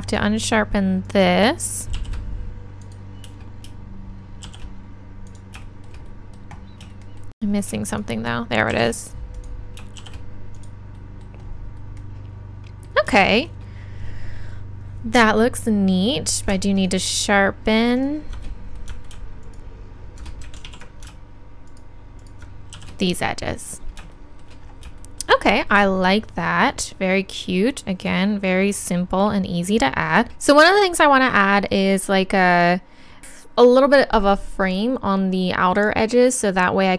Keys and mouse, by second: 2.0 shift+e, 2.9-4.9 drag, 5.3-12.4 drag, 8.7 shift+e, 20.6 ctrl+z, 22.7 shift+e, 30.3 a.